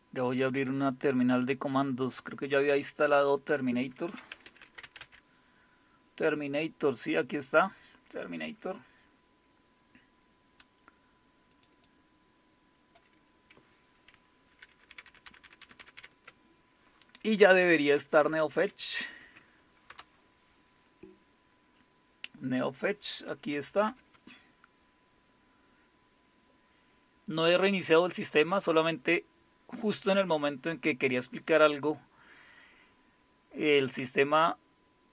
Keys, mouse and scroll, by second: 1.1-1.9 scroll down 1, 1.9 scroll down 1, 3.4 click, 4.1-5.5 typing, 7.5 click, 11.6 click, 11.8 click, 14.5 ctrl++, 14.7 ctrl++, 14.9 ctrl++, 15.1 ctrl++, 15.3 ctrl++, 15.6 ctrl++, 15.8 ctrl++, 17.3-19.0 typing, 19.2 Tab, 19.9 Return, 23.9 ctrl+-, 25.8 Up, 25.8 Return.